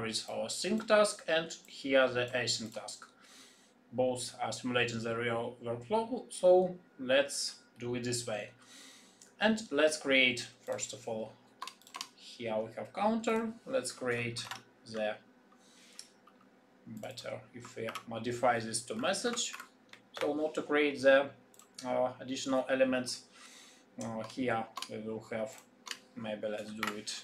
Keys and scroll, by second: 14.4 ,, 17.8 shift+F2.